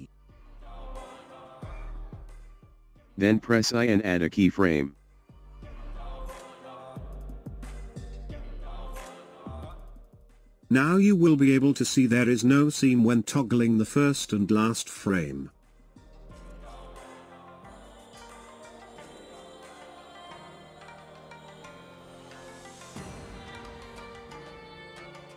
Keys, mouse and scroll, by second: 12.1-25.3 drag.